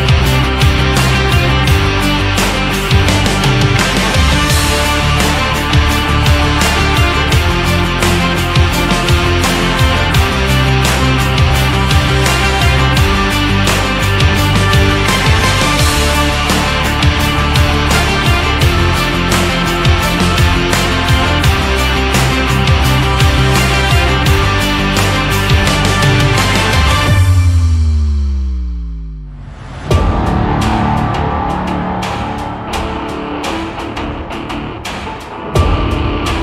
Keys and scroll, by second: 12.9 v.